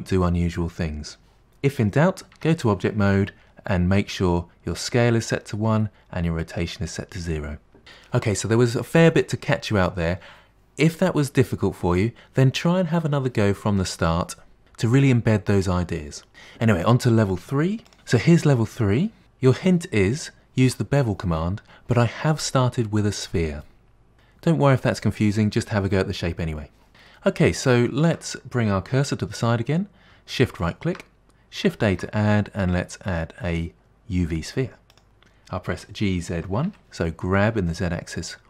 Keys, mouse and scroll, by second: 2.4 Tab, 18.6 middle click, 27.3-30.7 middle drag, 30.7 shift+right click, 31.9 shift+a, 35.8 g.